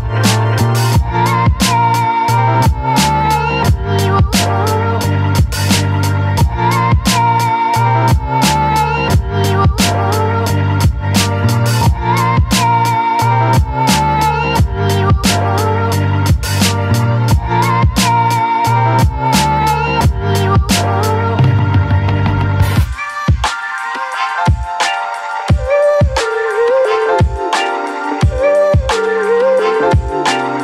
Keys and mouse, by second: 0.6 click, 1.1 click, 2.5 click, 2.9 middle click, 4.4-7.2 middle drag, 7.9-10.0 middle drag, 11.1 middle click, 13.2 click, 13.5 click, 14.0 click, 14.3 click, 14.6 click, 15.0 click, 15.7 ctrl+z, 15.9 click, 17.0 middle click, 17.8-19.0 middle drag, 19.0-21.0 drag, 22.4 middle click, 22.8 middle click, 23.9 middle click, 24.9 middle click, 25.5 middle click, 26.1-30.6 shift+drag.